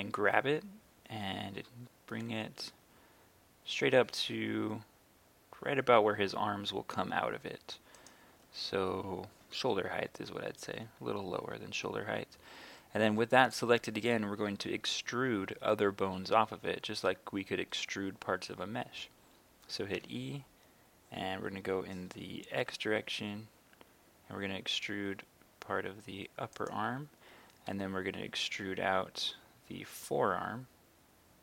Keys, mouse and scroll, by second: 2.6 z, 8.0 click, 20.0 e, 22.6 x, 26.6 click, 27.7 e, 29.3 z.